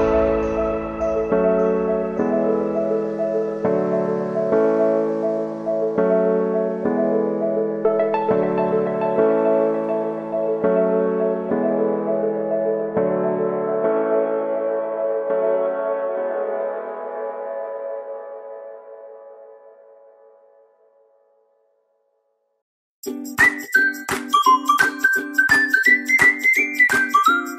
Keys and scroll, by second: 0.8 ctrl+z, 14.5 ctrl+z.